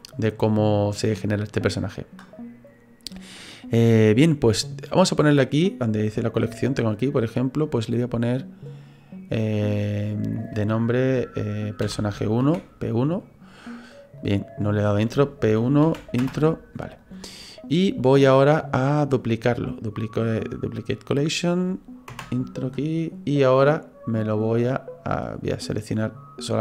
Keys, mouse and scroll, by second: 3.1 click, 4.1 click, 14.2 click, 14.3 click, 17.0 click, 18.0 right click, 23.4 click, 25.1 click, 25.9 right click.